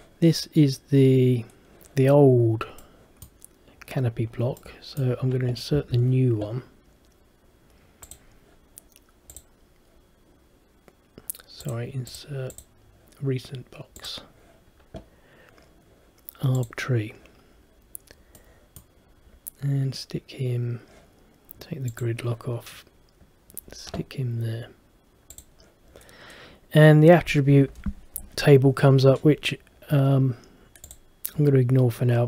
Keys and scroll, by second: 5.9 Escape.